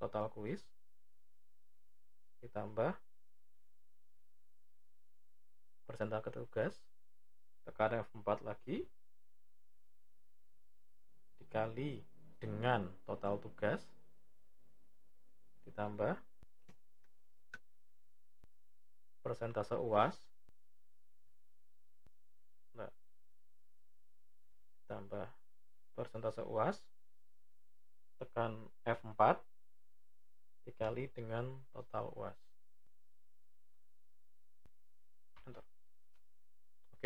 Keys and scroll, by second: 7.7 F4, 22.6 F4, 28.8 F4.